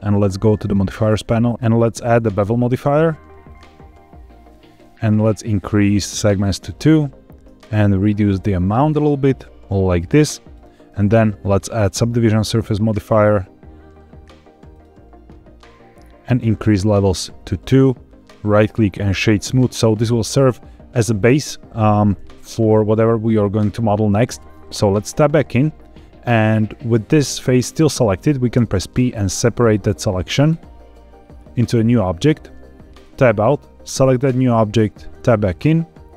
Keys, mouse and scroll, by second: 0.6 click, 1.5-3.5 drag, 6.1 click, 9.2-10.5 shift+drag, 11.0-14.8 drag, 15.5-17.4 scroll down 3, 17.4 click, 18.4 right click, 25.0 Tab, 28.5 p, 33.0 Tab, 34.0 click, 35.1 Tab.